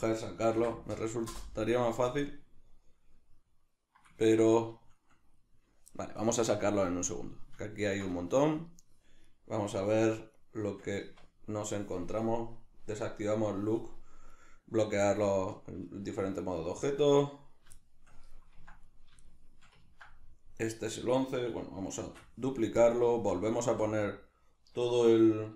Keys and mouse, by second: 1.3 Return, 2.1-7.0 middle drag, 7.0 click, 7.6-9.2 ctrl+middle drag, 9.2 right click, 10.4 right click, 11.0 Tab, 12.2-14.3 drag, 14.3 right click, 16.0-16.4 shift+middle drag, 16.4 right click, 17.2 right click, 17.8-18.9 shift+middle drag, 18.9 right click, 19.3-22.9 shift+middle drag, 22.0 shift+d, 22.9 click, 23.1 Tab.